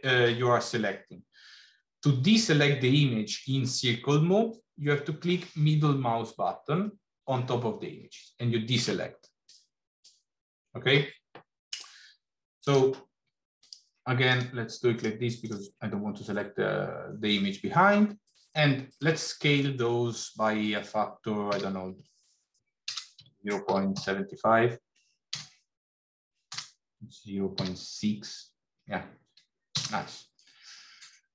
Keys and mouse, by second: 15.2 shift+click, 21.3 s.